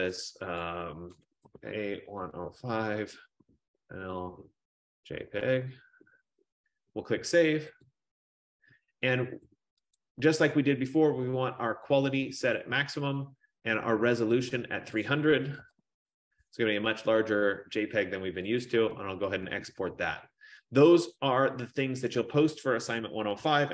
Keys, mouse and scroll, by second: 0.7 click, 1.6-5.6 typing, 8.0 click, 10.1 click, 12.7 click, 15.0 click, 15.7-16.1 typing, 18.8 click, 23.6 F15.